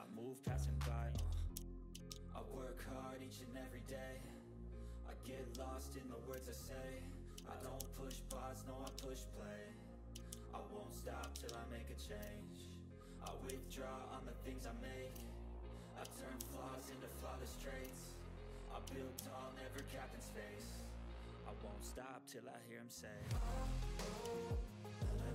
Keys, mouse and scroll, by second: 2.0 ctrl+z, 2.2 click, 5.9 click, 7.7 ctrl+g, 8.2 ctrl+d, 8.4 click, 8.9 ctrl+z, 9.1 click, 10.2 ctrl+d, 10.3 click, 11.3 ctrl+z, 11.8 click, 13.4 ctrl+d, 13.6 click, 16.3 ctrl+g, 17.7 ctrl+g, 17.7 click, 19.1 ctrl+g, 19.8-20.1 ctrl+scroll down 1, 20.8 ctrl+scroll up 1, 21.0 ctrl+middle click, 21.8-24.2 drag, 24.2 ctrl+scroll up 1, 24.5 click.